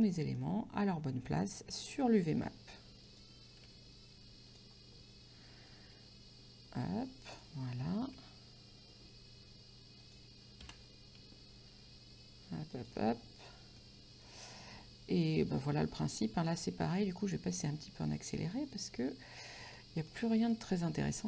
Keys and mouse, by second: 0.1 middle click, 1.8 s, 3.1 click, 3.7 g, 4.6 click, 6.1 s, 7.4 click, 8.2 g, 10.1 click, 10.7 s, 12.8 shift+click, 13.9 middle click, 16.6 middle click, 17.7 middle click, 19.8 middle click, 20.5 right click.